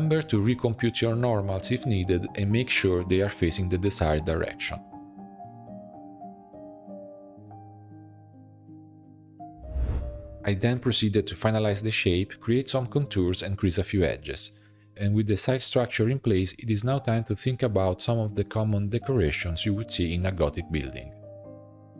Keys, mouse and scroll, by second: 0.3 click, 1.1-2.5 drag, 2.5 Tab, 2.8 a, 3.2 shift+n, 3.9 Tab, 4.6-6.1 drag, 6.1-6.9 middle drag, 6.9 click, 7.7 Tab, 7.9 a, 8.4-9.5 drag, 10.2 scroll up 2, 10.3 e, 11.8 alt+shift+click, 12.0 middle click, 12.2 e, 12.9 shift+middle click, 13.2 Tab, 13.5 shift+click, 13.8 shift+e, 14.4 shift+middle click, 14.7 shift+click, 15.3 shift+e, 15.9 shift+middle click, 16.4 alt+h, 16.6 click, 16.7 shift+middle click, 17.4-17.7 scroll up 1, 17.7 click, 18.5 shift+e, 19.3 shift+click, 19.6 shift+e, 20.0 shift+middle click, 20.2-20.5 scroll up 3, 20.8 shift+click, 20.9 shift+e, 21.6 click.